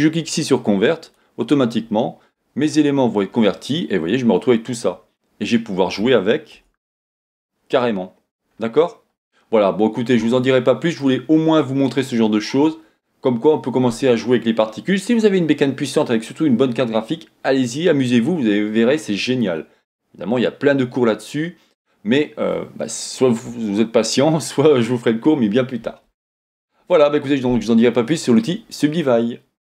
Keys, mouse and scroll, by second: 1.1 click, 2.7-3.3 scroll down 2, 3.3-3.8 scroll up 2, 3.8-5.5 middle drag, 5.5 click, 6.6 Tab, 7.9-9.6 scroll down 1, 9.6-10.3 scroll up 1, 10.3 Tab, 11.0-29.6 middle drag, 12.2-13.2 scroll down 2, 13.2-16.2 scroll down 1.